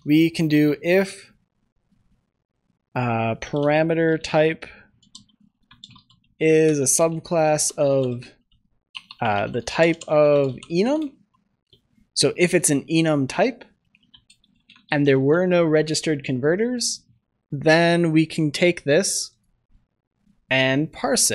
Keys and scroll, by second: 4.1 Return, 6.6 Return, 13.0 ctrl+s, 15.1 ctrl+s.